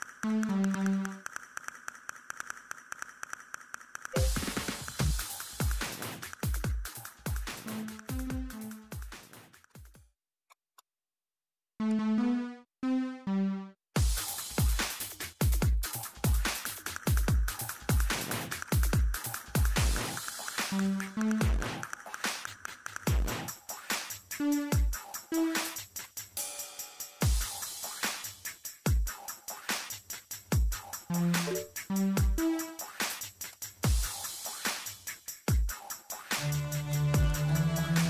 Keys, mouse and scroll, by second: 2.6 scroll up 1, 2.8 middle click, 5.8 scroll up 1, 6.0 scroll down 1, 6.6 ctrl+scroll up 1, 7.2 click, 15.9 middle click, 16.6 ctrl+middle click, 16.7 scroll up 1, 16.8 scroll down 1, 17.0 ctrl+middle click, 17.4 click, 21.7-22.5 typing, 22.4 click, 26.2-27.7 typing, 27.3 click, 32.4 scroll down 1.